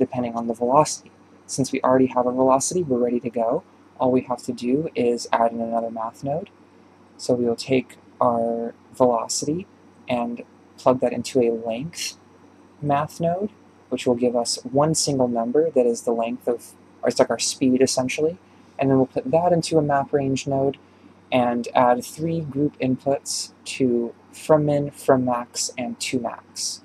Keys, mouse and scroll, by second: 4.4-7.8 drag, 7.8 shift+right click, 18.6-21.3 drag, 23.0 drag, 25.1 click.